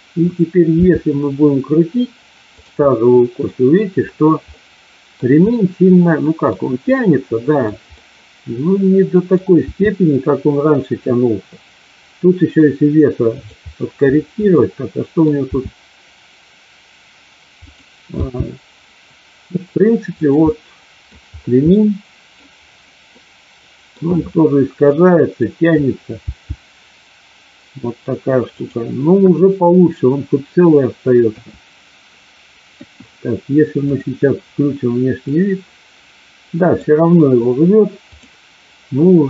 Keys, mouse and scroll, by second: 0.7 r, 2.8-3.3 middle drag, 4.5-5.1 middle drag, 5.5-6.5 middle drag, 6.8-7.6 middle drag, 7.8-9.3 middle drag, 9.6 r, 14.5 middle click, 15.5 r, 18.1 g, 20.1 click, 20.3-21.1 middle drag, 21.6-22.3 middle drag, 23.1-23.8 middle drag, 24.8-25.5 middle drag, 26.2 g, 28.5 click, 29.1 KP_1, 31.2 KP_2, 32.6 KP_1, 34.2 click, 35.2-36.7 middle drag, 38.2 click.